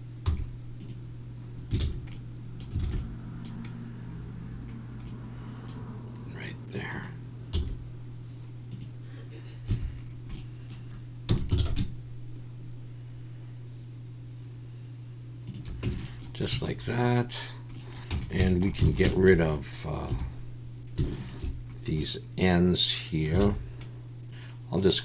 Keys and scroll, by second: 0.2 x, 1.8 ctrl+z, 2.8 alt+a, 7.5 x, 9.7 a, 11.3 e, 11.6 alt+s, 15.8 Tab, 18.1 Tab, 18.9 alt+a, 20.1 3, 23.4 alt+a.